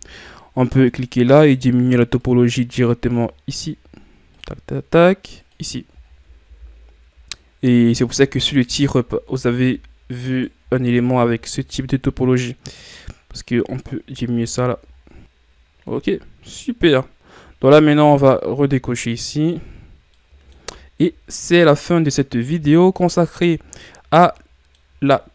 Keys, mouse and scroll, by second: 0.2 scroll up 2, 0.9-5.3 right drag, 5.3 click, 6.0-6.4 shift+scroll up 6, 6.4 a, 7.2-8.4 shift+scroll up 8, 8.4-9.5 shift+scroll down 12, 9.5-9.8 shift+scroll up 2, 10.2-10.6 right drag, 10.6 shift+scroll down 3, 10.9 scroll up 2, 13.6 click, 14.3 a, 14.6 scroll down 2, 14.8-15.2 shift+scroll up 6, 15.2 scroll down 1, 15.7 ctrl+scroll up 2, 16.1-16.5 scroll down 3, 19.4-19.9 drag, 19.9 scroll down 3, 20.1-25.0 middle drag, 25.0-25.3 scroll up 4.